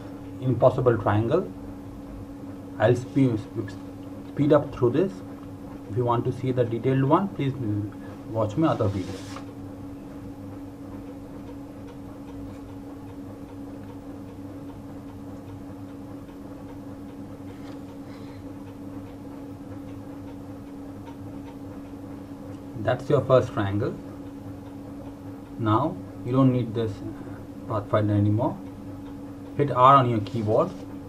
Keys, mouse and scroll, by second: 0.1 click, 1.4 d, 1.6 click, 2.3 click, 2.7 click, 4.6 d, 5.3 click, 6.2 d, 6.8 click, 7.0 Delete, 7.9 click, 8.6 click, 9.9 click, 11.7 click, 14.0 right click, 14.3 click, 14.8 Delete, 15.0 click, 15.1 Delete, 15.2 click, 15.4 Delete, 15.8 click, 18.3 click, 22.6 ctrl+Num_Lock, 23.3 ctrl+g, 26.0 click.